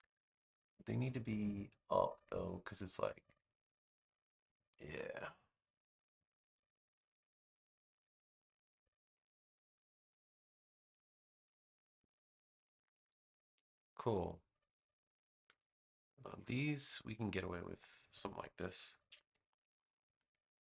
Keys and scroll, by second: 13.7 space, 18.9 super+c, 19.3 space.